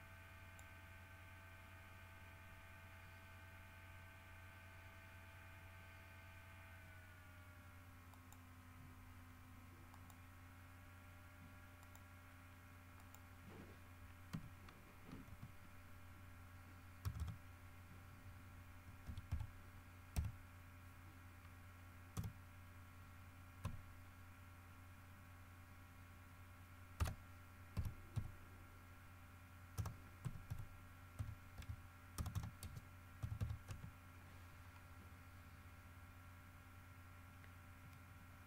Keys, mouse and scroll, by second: 8.3 click, 10.1 click, 12.0 click, 13.2 middle click, 14.5 f, 15.4 t, 17.2 BackSpace, 19.2 KP_1, 19.5 KP_5, 20.3 KP_Divide, 22.3 BackSpace, 23.8 KP_Decimal, 27.2 BackSpace, 27.9 KP_Multiply, 28.3 KP_3, 29.9-33.6 typing, 33.8 KP_Enter, 38.1-38.4 scroll up 2.